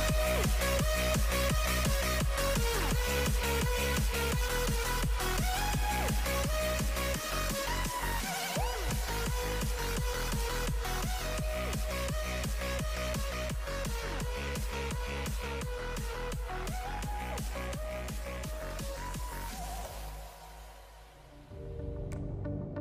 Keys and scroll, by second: 0.0 x, 1.7-4.0 typing, 5.4 x, 5.6 ], 6.7 ctrl+z, 7.0 ctrl+z, 8.6 ], 10.3 ctrl+i, 13.2 ctrl+KP_0, 14.8 ctrl+z, 19.3 ctrl+i, 21.0 ctrl+KP_0.